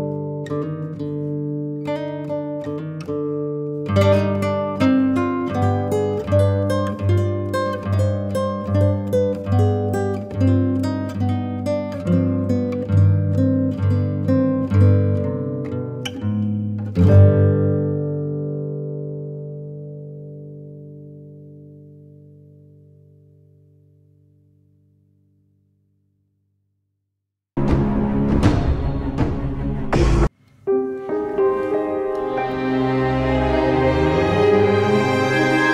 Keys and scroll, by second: 17.3 Delete, 18.0 super+Delete.